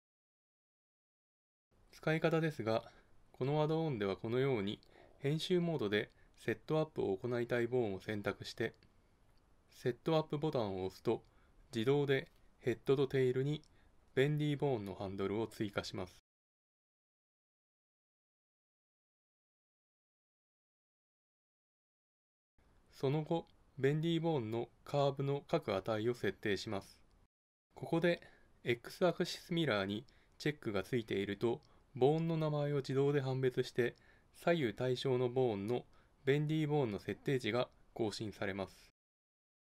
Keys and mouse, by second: 0.6-7.5 middle drag, 7.5-9.3 drag, 10.4-12.4 drag, 20.7-23.3 drag.